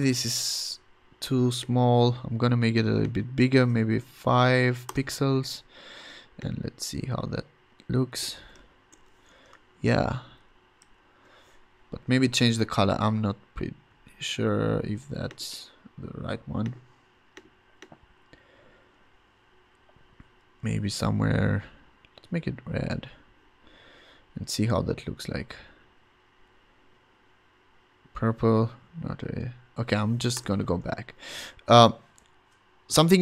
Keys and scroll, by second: 0.0 BackSpace, 1.0 BackSpace, 4.1 5, 4.9 Return, 8.9 shift+super+h, 9.2 v, 9.7 shift+Right, 10.1 shift+Up, 10.8 shift+Right, 30.3 BackSpace, 31.1 v.